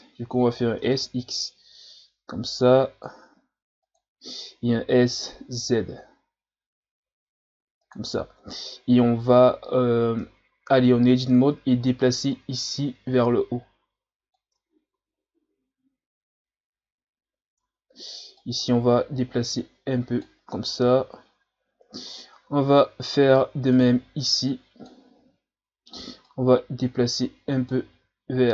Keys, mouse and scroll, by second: 0.6 s, 4.7 s, 8.6-9.2 scroll up 5, 9.9-10.2 scroll down 1, 10.2 Tab, 11.4-12.2 shift+scroll up 2, 12.3-14.5 drag, 14.5 Tab, 14.9 a, 17.6 Tab, 18.4-20.4 drag, 20.4-21.0 scroll down 1, 21.0-21.4 scroll down 2, 22.2 scroll down 1, 22.5 z, 22.8-23.7 scroll up 2, 23.7 right click, 24.0 b, 25.2 z, 26.3 click, 27.9 ctrl+z.